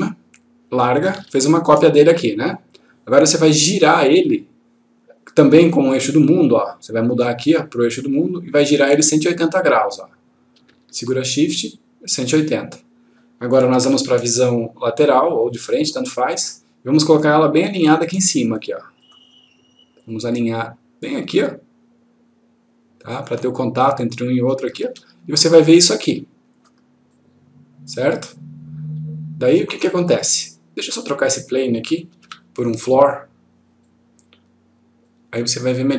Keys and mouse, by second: 7.6 click, 13.8 F3, 15.5-16.7 click, 19.0 click, 20.3-23.2 click, 24.9 F1, 26.0-26.6 click, 32.2 Delete, 33.9 click.